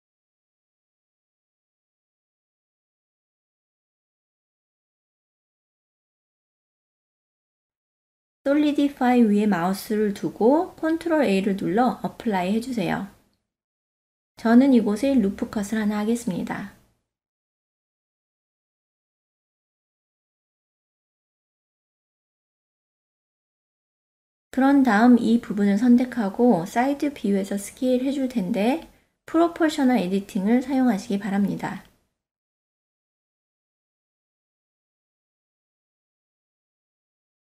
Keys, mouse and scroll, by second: 0.7 ctrl+2, 1.2 right click, 1.3-2.4 middle drag, 3.2 right click, 4.5-5.5 ctrl+middle drag, 5.7-6.1 shift+middle drag, 6.3-7.2 middle drag, 7.6 Tab, 9.3 ctrl+a, 10.8 Tab, 11.4 ctrl+middle click, 12.2 middle click, 13.2 shift+middle click, 15.0-16.1 middle drag, 16.6 ctrl+r, 18.9-21.5 middle drag, 21.7 ctrl+middle click, 22.2 shift+middle click, 23.9 KP_1, 24.8 alt+z, 25.5 click, 26.8 KP_3, 28.2 click, 29.3 click, 29.5-37.4 drag.